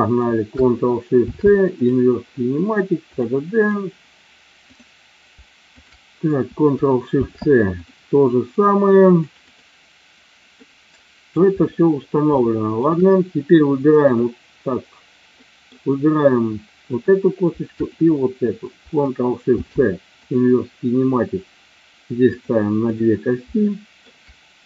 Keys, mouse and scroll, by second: 1.2 ctrl+shift+c, 3.1 click, 4.6 click, 5.7 shift+click, 7.1 ctrl+shift+c, 9.1 click, 10.5 middle click, 12.4 shift+middle click, 14.0 click, 15.4 middle click, 17.7 shift+click, 19.5 ctrl+shift+c, 22.4 click, 22.8 click, 23.6 shift+middle click.